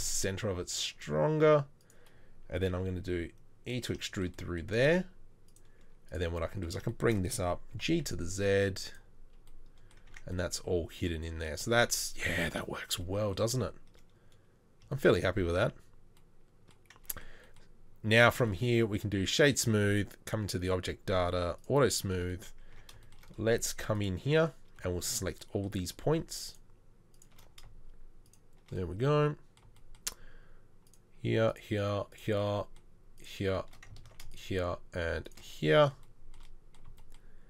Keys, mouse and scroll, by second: 3.9 shift+e, 7.7 g, 10.1 Tab, 18.4 space, 22.7 Tab, 34.1 ctrl+z.